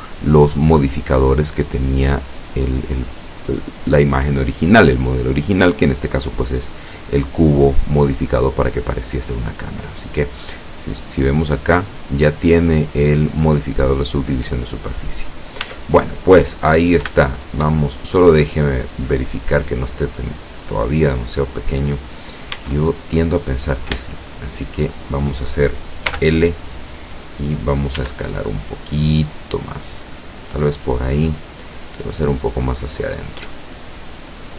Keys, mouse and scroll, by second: 10.0-10.6 scroll up 2, 10.6-11.6 scroll up 1, 11.6 click, 14.7-15.1 scroll down 1, 15.3 scroll up 2, 15.7 Tab, 16.3-17.1 scroll down 4, 17.4-21.3 shift+middle drag, 21.7-22.3 scroll up 2, 22.6 Tab, 23.2-23.8 scroll up 4, 24.5 shift+middle click, 26.2 l, 28.1 s, 30.2 click, 31.0-32.5 drag, 32.7-33.0 scroll down 1, 33.2 scroll down 1.